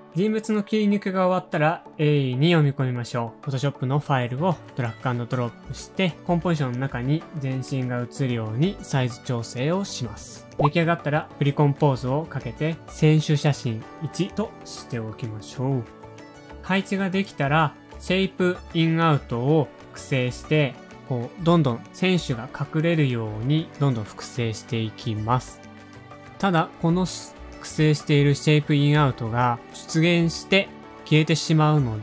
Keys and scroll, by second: 0.5 super+Tab, 7.1 shift+super+-, 7.2 shift+super+-, 7.3 shift+super+-, 7.9 shift+super+h, 7.9 typing, 9.4 shift+Left, 9.4 shift+Up, 10.2 alt+/, 10.8 shift+super+c, 11.6-14.4 typing, 13.3 Return, 19.0 super+d, 23.6 shift+super+a, 24.5 super+Home, 24.6 Page_Down, 24.8-25.5 typing, 25.3 super+d, 25.6 super+d, 26.0 super+d, 29.9 super+Down, 29.9 super+Up, 29.9 0, 31.1 space, 31.6 shift+Page_Up, 31.7 super+Down, 31.7 super+Up.